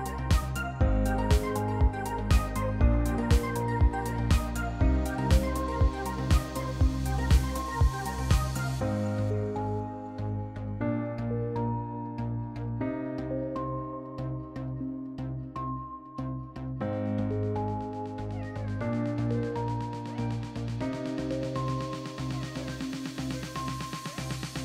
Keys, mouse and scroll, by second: 0.2 click, 2.0 F2, 4.4 click, 5.3 F1, 6.5 click, 6.9 click, 8.7 click, 10.3 ctrl+shift+c, 11.2 F2, 13.2 click, 13.9 Delete, 15.3 click, 15.4 Delete, 17.3 click, 18.4 click, 18.8 =, 18.9-21.2 =, 21.0 click, 22.1 click, 23.2 click.